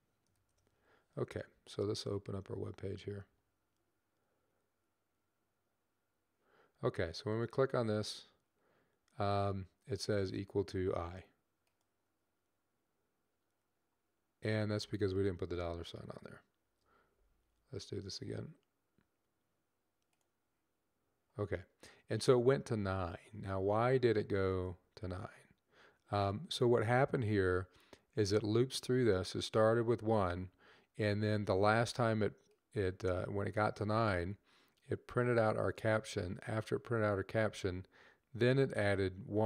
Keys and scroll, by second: 16.4 shift+4.